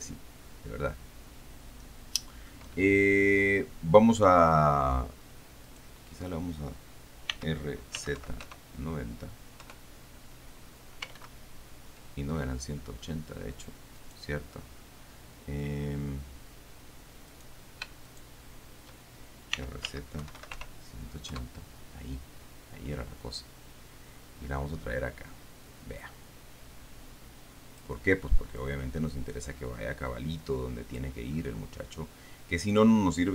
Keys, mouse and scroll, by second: 0.2-2.9 shift+middle drag, 5.9 middle click, 6.1 right click, 7.6 r, 8.4 KP_9, 8.9 KP_0, 10.0 KP_Enter, 11.4 ctrl+z, 14.4 right click, 17.6 right click, 18.3 shift+right click, 19.8-20.9 typing, 21.6 KP_Enter, 23.8-28.3 drag, 29.1-31.4 drag, 31.6-33.3 middle drag.